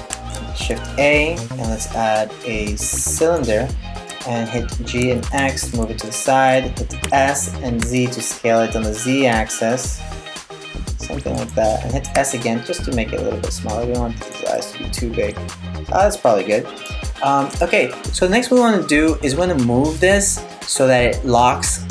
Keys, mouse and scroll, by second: 3.7 g, 6.6 s, 11.8 s, 14.2 middle click.